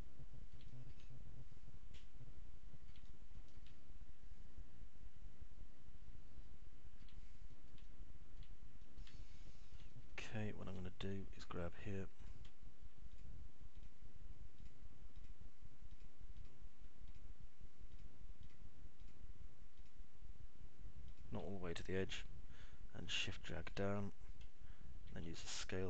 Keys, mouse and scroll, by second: 0.8-1.8 alt+middle drag, 1.3 alt+scroll up 1, 1.9 middle click, 2.3-4.1 alt+middle drag, 4.4 middle click, 4.4-5.8 scroll up 2, 4.9-8.1 alt+middle drag, 8.8 middle click, 9.1 alt+middle click, 10.3 alt+middle click, 11.1 middle click, 11.4 alt+middle click, 12.4 click, 14.9 ctrl+click, 15.8 ctrl+click, 16.3 ctrl+click, 17.4 ctrl+click, 20.1 ctrl+click, 24.3 shift+click.